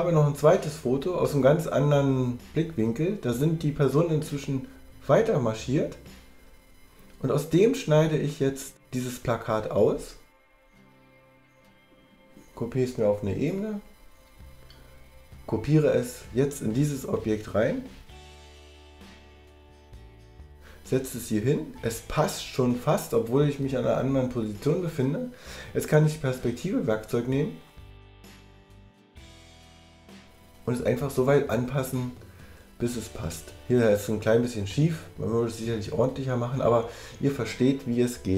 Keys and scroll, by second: 16.0 super+j, 20.0 super+v.